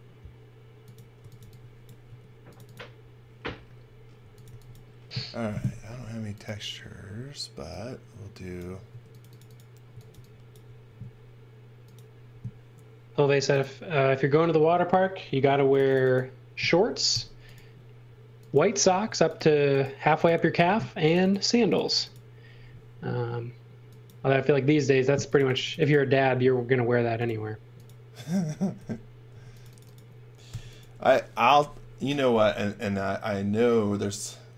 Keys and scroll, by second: 0.9-2.1 typing, 4.2 x, 4.5 v, 5.6 space, 8.9-10.8 typing, 15.5 space, 17.1 n, 19.0 space, 28.8 n, 29.3 space, 30.5 n.